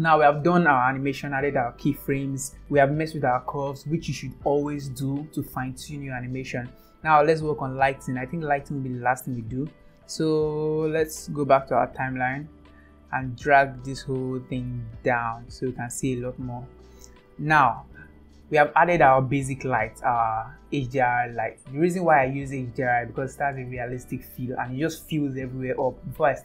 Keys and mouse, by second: 8.3 click, 11.4-12.8 drag, 13.9-16.0 drag, 17.9 ctrl+s.